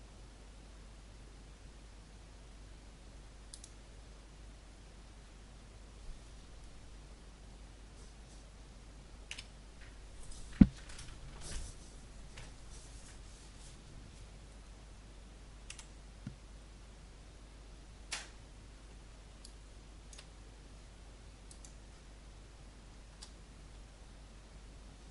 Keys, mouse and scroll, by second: 3.9 click, 9.3 F12, 15.6 Escape, 16.2 scroll down 1, 19.3 alt+click, 20.4-21.4 scroll down 1, 21.4 right click, 23.1 n.